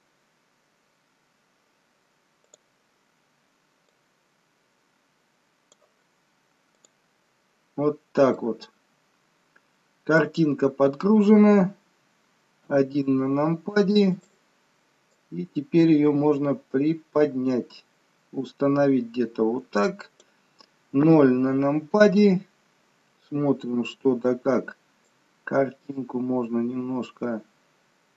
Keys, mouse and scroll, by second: 2.6 click, 4.0 click, 7.0 click, 8.0-8.7 scroll down 2, 8.5 middle click, 10.7-11.8 scroll up 3, 12.8 KP_1, 15.3 click, 21.2 KP_0, 25.3 click.